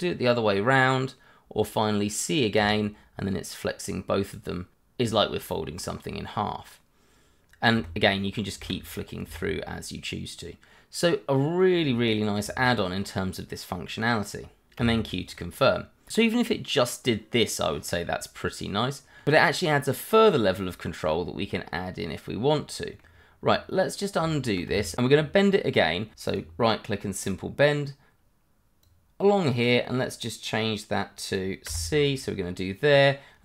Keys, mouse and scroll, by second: 2.8 click, 5.6 click, 9.1 click, 12.4 click, 12.5 shift+click, 14.8 q, 15.0 scroll down 1, 15.3 middle click, 17.2-17.7 scroll up 1, 17.7 middle click, 20.4 shift+middle click, 20.7-21.1 scroll up 1, 21.1 middle click, 24.2 ctrl+z, 24.8 shift+middle click, 25.5 middle click, 25.7 shift+middle click, 26.3 right click, 27.2 click, 31.7 click.